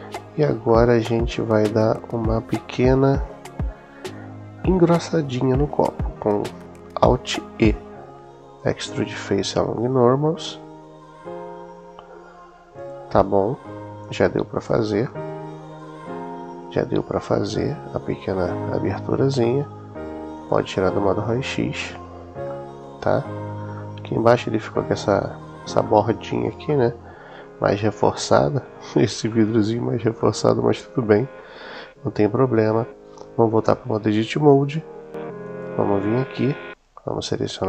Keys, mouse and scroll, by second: 0.6 middle click, 1.6 middle click, 7.4 alt+e, 12.6 click, 13.9 Tab, 14.9-18.3 middle drag, 19.2 middle click, 20.2 click, 21.1-22.0 middle drag, 22.4-23.4 middle drag, 23.6-25.5 middle drag, 25.7-26.3 middle drag, 26.5-27.3 middle drag, 27.5-29.0 middle drag, 29.1-29.7 middle drag, 30.1 middle click, 33.5 Tab, 35.2 click.